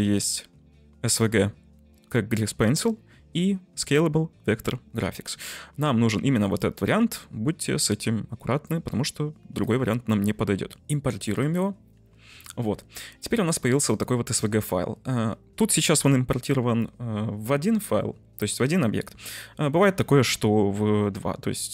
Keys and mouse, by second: 13.3 drag, 13.8-14.2 middle drag.